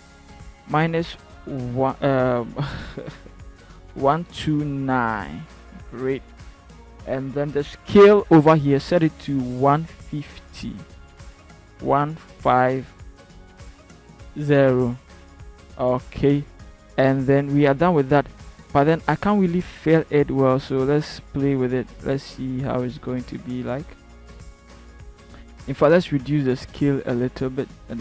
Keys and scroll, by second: 0.8 -, 4.0 1, 4.2 2, 4.8 9, 11.8-13.7 typing.